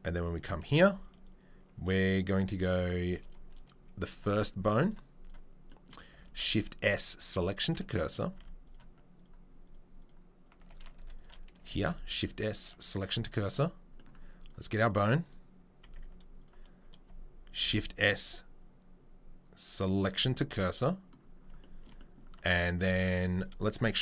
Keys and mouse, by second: 0.4 Tab, 0.6 a, 4.1 click, 4.8 click, 5.2 click, 6.1-8.7 shift+middle drag, 6.2 shift+s, 8.3 Tab, 8.7-9.2 drag, 9.2-9.6 middle drag, 9.6 click, 9.7 middle drag, 10.0 click, 10.1-11.1 middle drag, 10.5 Tab, 11.0 1, 11.1 click, 11.2-14.4 middle drag, 11.7 shift+s, 13.0 Tab, 14.4 click, 14.5 middle click, 14.8 right click, 14.9-15.2 middle drag, 15.2 click, 15.3-22.8 middle drag, 15.8 Tab, 17.6 shift+s, 22.3 Tab, 22.8 Tab.